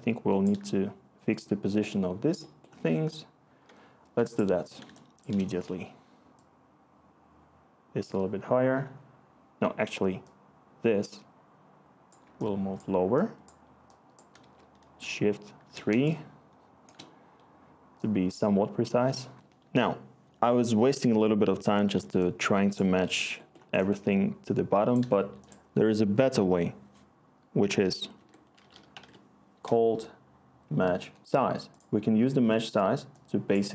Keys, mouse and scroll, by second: 14.4-15.7 typing, 28.1 Tab, 28.3-29.5 typing, 30.6 Down, 30.9 Return.